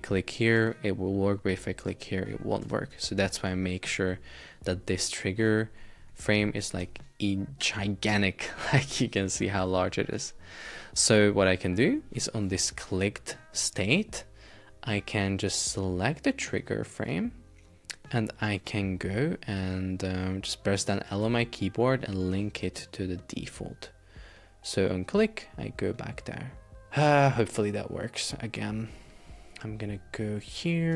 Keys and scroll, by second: 2.7 Escape, 6.9 shift+super+4, 8.1 Escape, 10.2 Escape.